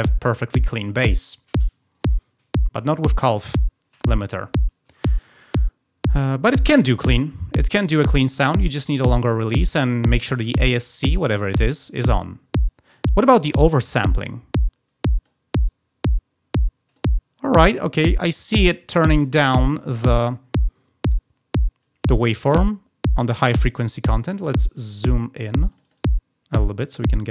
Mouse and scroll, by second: 8.6 click, 13.9-15.2 drag, 15.6-16.9 drag, 22.3-23.6 drag, 24.6 click, 24.9 click, 25.5 click, 25.8 click, 25.9 click, 26.0 click.